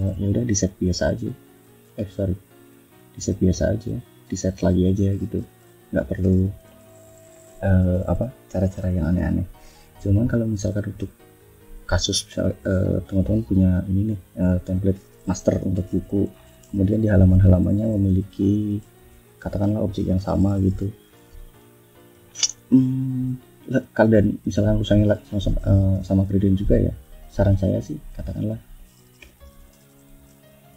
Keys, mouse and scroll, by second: 1.8 ctrl+z, 2.1 ctrl+click, 3.4 click, 5.2 click, 6.5 F1, 6.8 click, 7.4 ctrl+scroll down 2, 9.5 click, 11.1 click, 13.3 click, 14.1-15.5 drag, 15.5 F1, 16.1 shift+scroll down 2, 17.0 ctrl+d, 17.3 ctrl+middle click, 18.2 ctrl+shift+scroll down 3, 19.1 ctrl+shift+d, 19.4 ctrl+middle click, 20.4 ctrl+shift+scroll up 3, 21.1 ctrl+scroll down 2, 21.6 ctrl+click, 22.1 ctrl+scroll down 3, 23.3 scroll up 2, 23.8 click, 25.5 ctrl+scroll up 2, 26.4-26.7 scroll up 2, 27.4 middle click, 27.6 scroll up 1, 27.8 middle click, 29.0 Home, 30.0 shift+click.